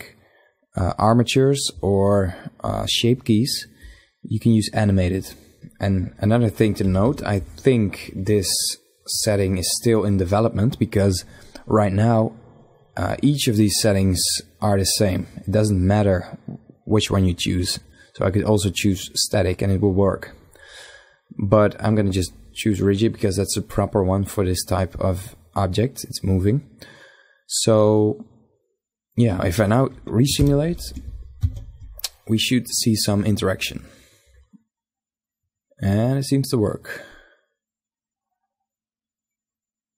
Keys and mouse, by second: 3.1-4.8 drag, 5.0 click, 5.8 KP_1, 6.4 KP_5, 11.0-13.0 drag, 29.2 shift+Left, 29.8 alt+a.